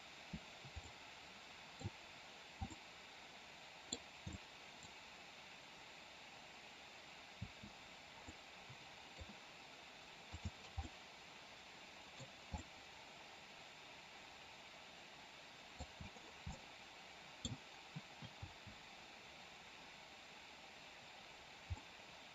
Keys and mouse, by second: 0.7-1.9 middle drag, 2.7-3.9 middle drag, 4.3-4.9 middle drag, 7.4 space, 8.3-9.0 middle drag, 10.8-12.0 middle drag, 12.5-15.8 middle drag, 16.4-17.4 middle drag, 18.4 space, 21.7-22.3 middle drag.